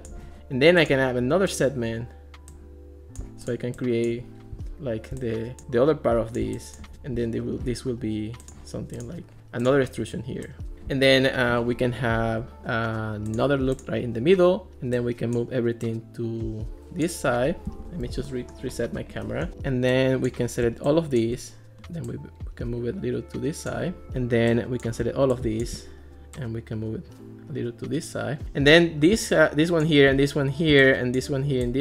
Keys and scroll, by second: 17.7 alt+r.